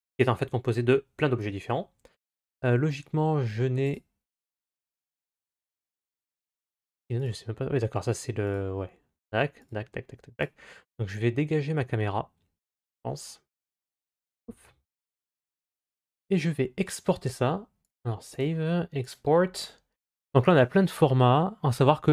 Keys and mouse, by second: 3.6 click, 5.2 click, 6.4 click, 9.4 click, 14.1 Delete, 15.6-17.7 drag, 18.2-22.1 drag.